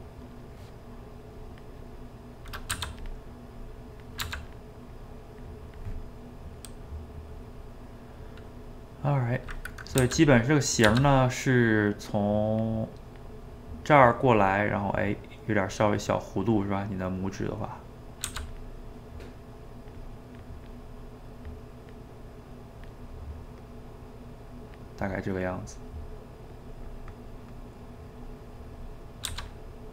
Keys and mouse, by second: 1.7 middle click, 2.7 f, 3.6 click, 4.3 f, 4.9-6.0 drag, 6.0-7.3 middle drag, 7.3 click, 7.9 middle click, 8.7-10.0 drag, 10.0 f, 10.9 f, 11.2 middle click, 11.7-13.4 drag, 13.4-16.4 middle drag, 16.5-18.3 drag, 18.3 f, 18.7 middle click, 19.2-22.4 drag, 22.4 middle click, 22.8 click, 23.0-24.5 middle drag, 24.5 click, 25.4 middle click, 25.9 click, 26.7-29.3 middle drag, 29.3 f, 29.7 middle click.